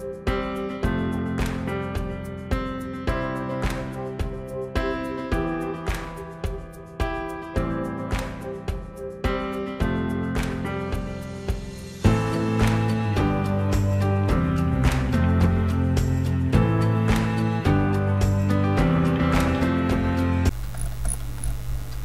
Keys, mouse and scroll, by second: 0.0 click, 0.4 scroll down 2, 0.5 alt+right click, 0.7 click, 0.9 alt+right click, 0.9 click, 1.1 alt+scroll up 1, 1.2 click, 1.8 alt+scroll down 1, 2.1 alt+scroll up 1, 2.2 alt+right click, 2.2 click, 2.6 alt+scroll down 2, 2.8-3.4 alt+scroll up 3, 3.1 ctrl+click, 3.4 click, 4.2 click, 4.3 alt+right click, 4.6 alt+scroll down 1, 4.7 alt+scroll up 1, 5.0 click, 5.1 alt+right click, 5.3 click, 5.4 alt+right click, 5.4-6.7 drag, 6.7 alt+right click, 6.8 click, 7.2 alt+scroll up 1, 7.3 alt+right click, 7.5 click, 8.0 alt+right click, 8.0 click, 8.3 alt+scroll down 1, 8.4 alt+scroll up 1, 8.6 click, 8.7 alt+right click, 8.8 click, 9.2 alt+scroll up 1, 9.3 alt+right click, 9.4 click, 9.5 scroll down 1, 9.8 scroll up 1, 10.0 click, 10.1 alt+scroll down 1, 10.3 alt+scroll up 1, 10.4 click, 11.3 alt+scroll down 1, 11.4 scroll up 2, 11.6 click, 12.3 alt+scroll down 2, 12.6 alt+scroll up 1, 12.6 alt+right click, 12.7 click, 13.2 alt+scroll down 1, 13.5-13.8 alt+scroll up 3, 13.8 alt+right click, 13.9 click, 14.6-15.2 scroll down 1, 15.2 alt+scroll down 1, 15.6 alt+scroll up 1, 15.7-16.1 alt+scroll down 3, 15.8 click, 15.9 click, 16.3 ctrl+d, 18.9 alt+Num_Lock, 19.0 alt+scroll up 1, 19.1-19.9 scroll down 3, 19.1 click, 20.1 click, 20.1 alt+scroll up 1, 20.2 alt+scroll down 1, 20.3-20.8 alt+scroll up 3, 20.8 scroll down 1, 21.2 alt+scroll down 1.